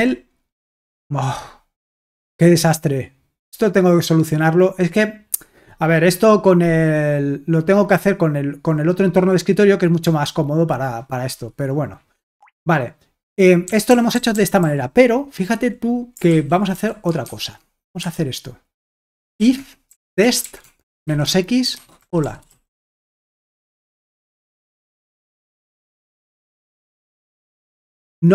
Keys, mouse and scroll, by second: 0.6 super+h, 8.5-11.6 drag, 12.4 Escape, 13.6-15.1 typing, 16.5-17.3 typing, 18.0 Escape, 18.5-23.0 typing, 23.4 Escape, 24.3-27.2 typing.